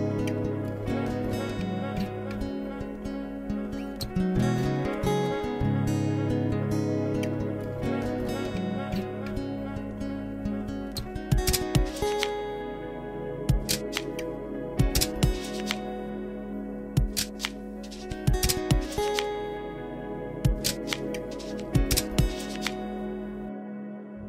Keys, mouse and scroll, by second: 1.2 ctrl+z, 2.4 ctrl+KP_Subtract, 3.6 x, 5.2-8.3 middle drag, 10.1 Tab, 10.9 shift+a, 14.6 click, 15.9-16.3 middle drag, 16.4 Tab, 16.4 click, 16.7-20.1 typing, 16.8 click, 18.4 click, 18.8 middle click, 19.8 middle click, 20.5 ctrl+r, 21.2 click, 22.0 middle click, 22.2 Tab, 23.6 click.